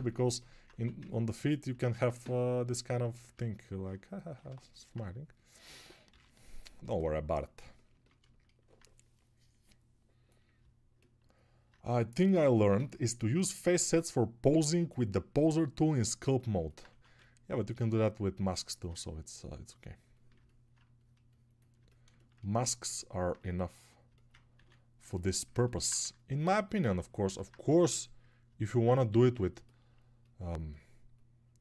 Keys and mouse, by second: 0.9 ctrl+1, 10.6-24.0 alt+drag, 10.6-24.0 alt+middle drag, 10.6-24.0 alt+right drag.